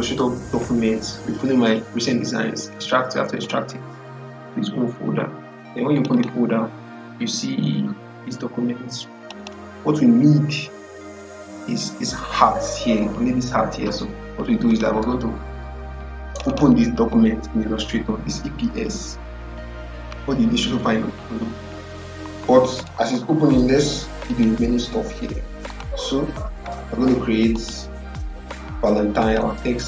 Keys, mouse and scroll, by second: 3.3 click, 5.8 click, 9.1 click, 14.6 click, 14.8 click, 24.2 click.